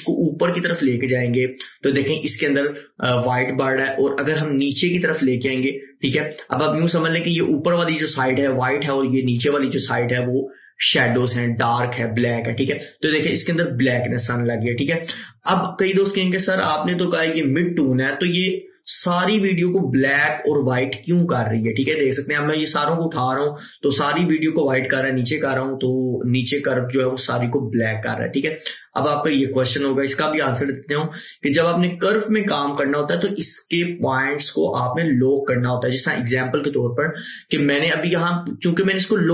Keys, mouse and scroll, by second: 11.3-21.3 drag, 32.3 click.